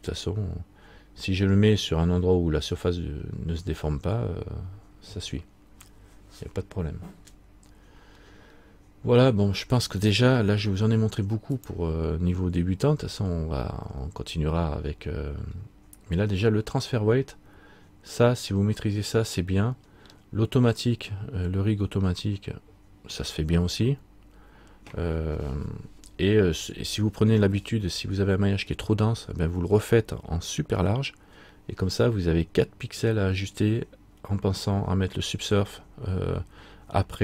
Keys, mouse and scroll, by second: 8.4-10.8 scroll down 1, 10.8 r, 15.3-16.0 scroll up 1, 16.0-17.5 scroll up 5, 20.0-22.2 scroll down 1.